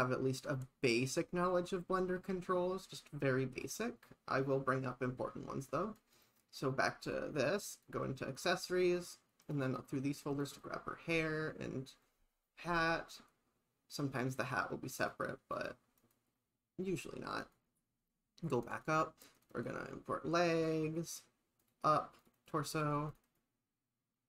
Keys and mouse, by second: 6.1 click, 12.8 click, 20.6 click.